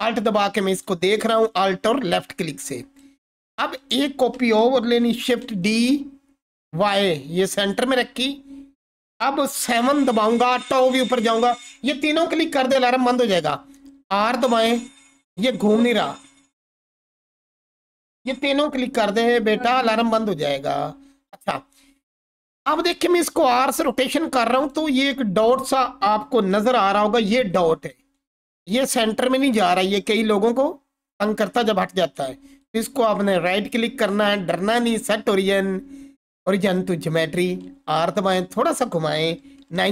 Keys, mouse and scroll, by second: 5.0 shift+d, 6.6 y, 7.6 click, 9.7 7, 14.0 r, 15.1 right click, 23.1 r, 24.6 right click, 26.4 ctrl+4, 32.9 right click, 32.9-39.9 scroll down 1.